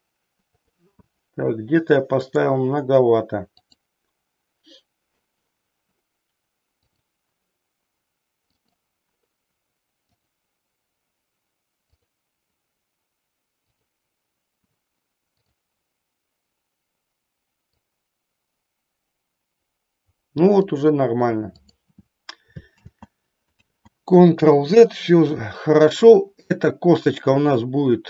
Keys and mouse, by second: 0.6-1.9 drag, 2.3-3.9 drag, 6.7-8.3 drag, 8.6-9.9 drag, 10.2 click, 11.8 click, 13.7 click, 15.3-16.7 drag, 17.8-20.7 drag, 21.6 click, 22.8 ctrl+z, 23.6 ctrl+z, 25.9-27.4 drag.